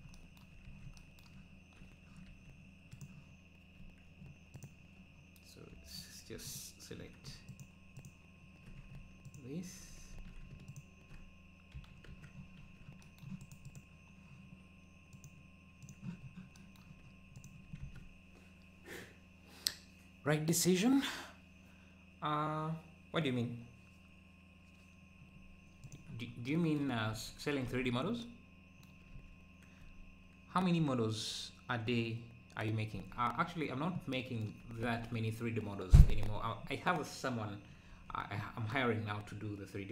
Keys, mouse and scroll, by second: 0.7 ctrl+s, 4.6-6.9 drag, 8.0 alt+shift+click, 9.6 alt+shift+click, 10.1 ctrl+z, 10.7 alt+shift+click, 11.7 f, 12.1 Tab, 12.4 scroll down 4, 15.1 Right, 15.1-16.2 drag, 16.2-16.5 scroll down 5, 17.3 click, 17.8 ctrl+s, 25.9 click, 27.2 ctrl+s, 27.7 ctrl+s, 29.2 ctrl+s, 32.1 click, 33.0 ctrl+s, 33.5 `, 34.9 ctrl+s, 37.9 ctrl+s.